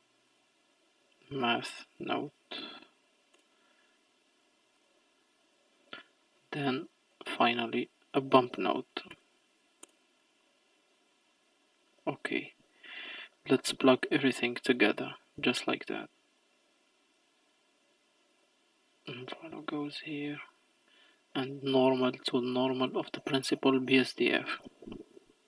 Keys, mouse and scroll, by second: 5.4 click, 6.4 shift+a, 11.7-12.3 scroll up 4, 12.3-14.2 middle drag, 14.2 click, 15.8-18.6 drag, 20.5-21.8 middle drag, 21.8 click, 25.2-25.4 middle drag.